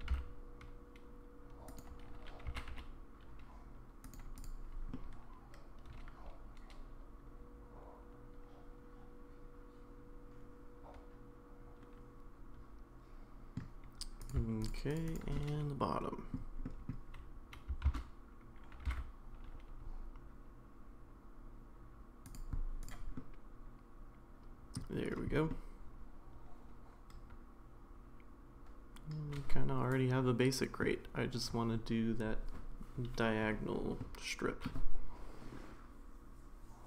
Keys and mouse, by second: 0.0 g, 2.5 g, 4.3 click, 4.9-13.6 middle drag, 14.9 shift+click, 15.4-16.3 middle drag, 16.6 middle drag, 18.0 shift+d, 22.8 click, 23.1-24.7 middle drag, 25.5-30.8 middle drag, 34.0-34.7 middle drag.